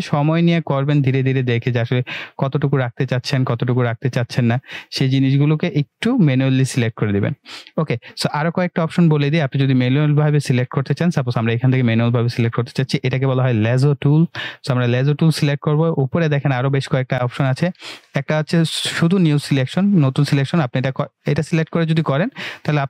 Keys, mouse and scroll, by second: 3.8-4.2 scroll down 1, 5.0-5.9 drag, 10.7 click.